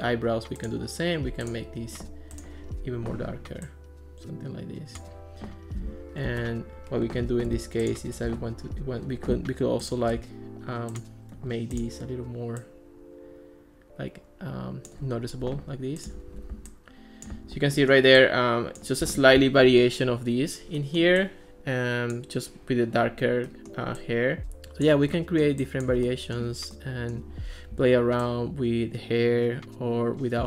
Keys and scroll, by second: 6.3 Escape.